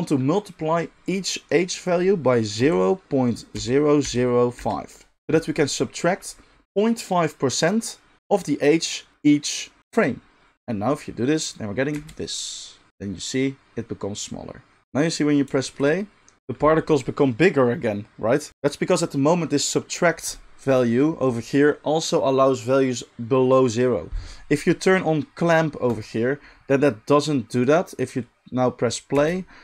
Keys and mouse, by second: 11.9 space, 18.5-25.8 middle drag, 25.8 click, 26.0-27.6 middle drag, 27.6-29.6 drag, 29.1 space.